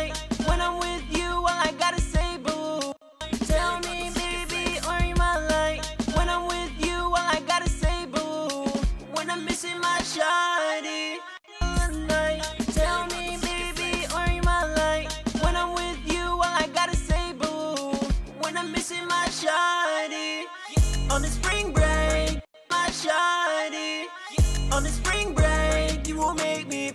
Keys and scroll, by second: 9.6 ctrl+shift+x, 11.7 typing, 14.6 e.